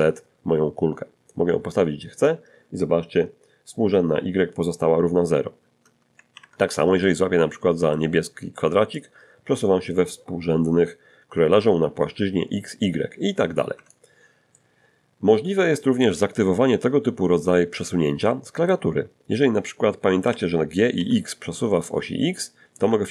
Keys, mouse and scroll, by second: 6.3 alt+g, 7.0-8.1 alt+middle drag, 9.0-14.1 drag, 13.8 Escape, 14.5-16.2 middle drag, 16.2 scroll down 1, 16.5-17.0 scroll up 1, 17.0-17.3 scroll down 1, 17.3-18.9 middle drag, 20.3 g, 21.0 x, 22.8 Escape.